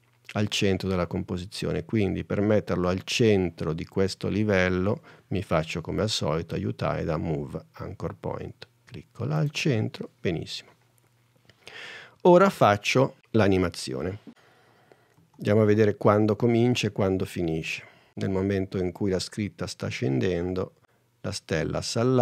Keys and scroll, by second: 15.5 super+Tab.